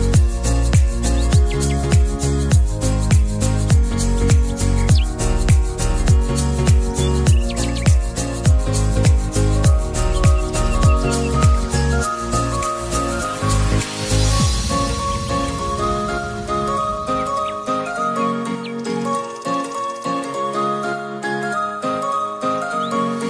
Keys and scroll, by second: 3.0 ctrl+z.